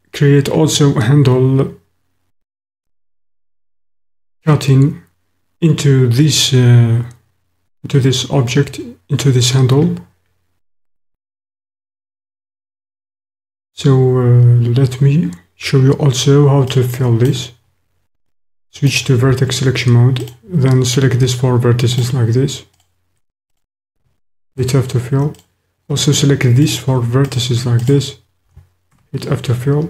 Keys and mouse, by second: 3.5 middle click, 16.6 click, 16.7 middle click, 17.0 click, 18.9 click, 20.2 click, 24.5 f, 27.4 shift+click, 27.8 shift+click, 28.9 f.